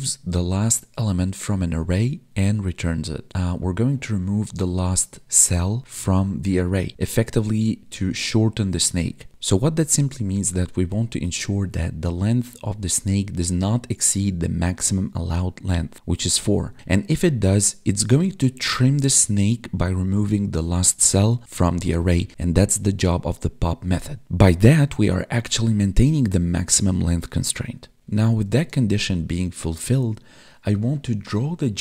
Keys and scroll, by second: 16.8 Down, 17.1 Right, 17.4 Up, 18.1 Right, 18.3 Down, 18.4 Left, 18.7 Down, 19.0 Right, 19.2 Up, 19.3 Left, 19.7 Down, 20.1 Right, 20.2 Up, 20.3 Left, 20.3 Up, 20.7 Right, 20.9 Down, 21.3 Right, 21.5 Down, 21.7 Left, 22.3 Up, 22.4 Right, 22.7 Down, 22.8 Left, 23.3 Up, 23.4 Left, 23.5 Down, 23.8 Right, 24.0 Up, 24.0 Left, 24.2 Up, 24.4 Left, 25.1 Up, 25.5 Right, 25.6 Down, 25.8 Left, 26.0 Down, 26.4 Right, 26.5 Up, 26.6 Right, 26.7 Up, 26.8 Right, 27.1 Up, 27.2 Right, 27.2 Up, 27.3 Right, 27.3 Up, 27.5 space, 28.1 Down.